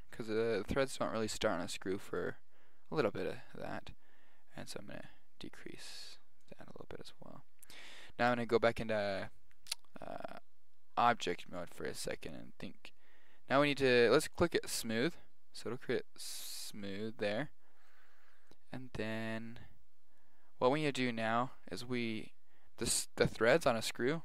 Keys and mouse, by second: 4.7 click, 8.3 Tab, 14.4-16.0 drag, 16.1-17.3 middle drag, 17.4 middle click, 17.9-20.3 middle drag, 21.1-22.7 middle drag, 22.8 middle click.